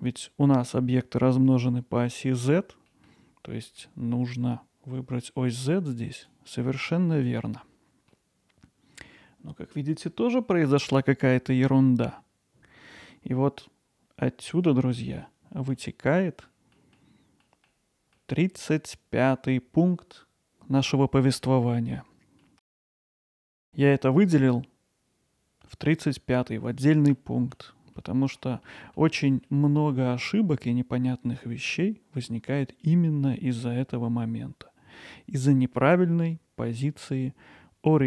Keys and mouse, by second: 2.9 middle click, 3.6 middle drag, 6.2-7.4 drag, 8.1-9.1 middle drag, 15.2 middle click, 16.2 middle click, 16.7 middle click, 18.2 middle drag, 21.4 middle click, 22.4 middle click, 23.7 middle drag, 27.1 middle click, 28.0-28.4 middle drag, 28.7-29.0 middle drag, 29.5-29.9 middle drag.